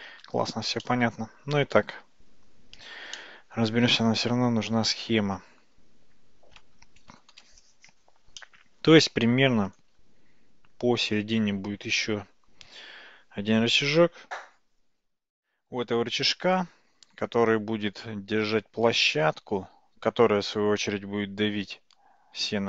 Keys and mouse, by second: 0.9-3.0 shift+middle drag, 3.2-7.3 middle drag, 8.4 middle click.